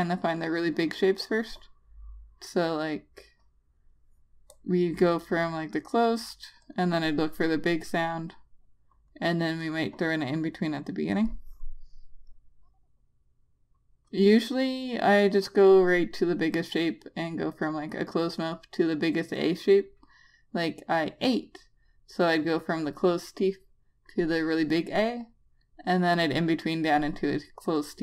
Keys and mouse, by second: 4.8 Return, 8.7 click.